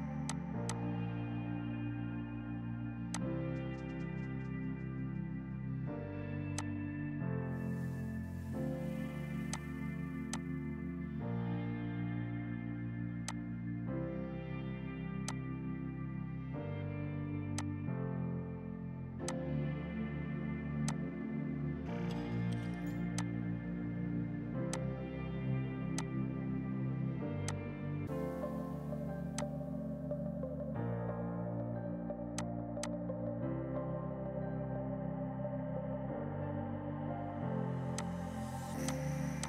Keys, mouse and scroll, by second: 0.3 shift+click, 0.5 shift+Page_Down, 0.7 shift+click, 0.8 typing, 2.1 right click, 3.2 click, 8.2 space, 9.6 click, 9.9 KP_0, 10.4 click, 10.6 KP_0, 11.0 KP_Enter, 12.4 right click, 13.3 click, 14.0 F4, 15.0 F2, 15.3 click, 15.6 right click, 17.5 F2, 17.6 click, 20.9 shift+click, 23.2 click, 23.8 F4, 24.6 F2, 24.8 click, 25.9 F2, 26.0 click, 27.3 Escape, 27.5 click, 28.4 ctrl+d, 29.4 click, 29.6 right click, 32.4 click, 34.1 ctrl+q, 35.8 shift+Page_Up, 36.9 click.